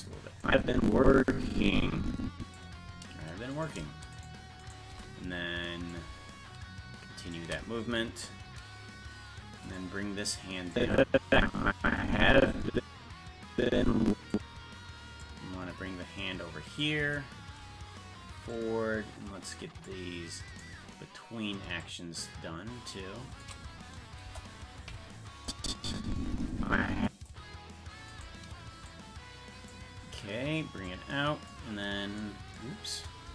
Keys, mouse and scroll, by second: 0.4-2.5 drag, 3.5 right click, 4.2 shift+right click, 5.9-7.3 shift+drag, 9.7 right click, 10.7-14.3 drag, 15.2-16.8 drag, 18.5-19.8 drag, 20.6 right click, 21.8-23.4 shift+drag, 24.2 KP_0, 25.4-27.2 drag, 28.2 right click, 28.8 click, 30.8 click, 33.2 KP_0.